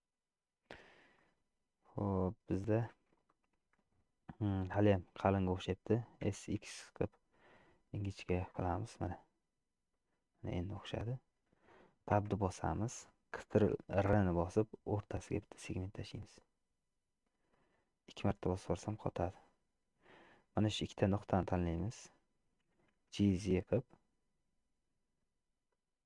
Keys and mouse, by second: 1.3-2.8 middle drag, 3.4 shift+middle click, 4.5 middle click, 6.3 s, 10.5 middle click, 12.4 Tab, 14.1 ctrl+r, 17.6-19.0 middle drag, 23.2 g.